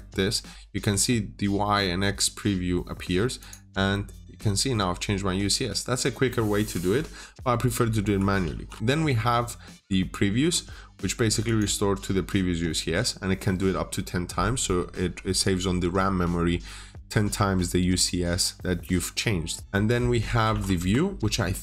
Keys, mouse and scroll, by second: 3.3 click, 3.6-8.4 scroll down 1, 8.4-8.7 typing, 8.8 Return, 11.3 click, 20.1 typing, 20.6 Return.